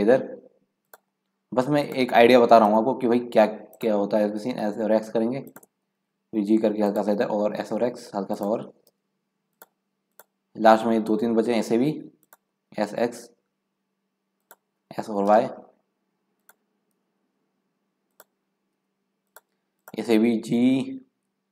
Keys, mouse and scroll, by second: 1.8 click, 2.6 g, 4.5-5.9 drag, 4.5 s, 5.9 g, 7.2 s, 8.9 g, 10.1 click, 10.7 g, 12.6 s, 14.9 s, 16.9 g, 18.4 s, 19.8 click, 20.5 g.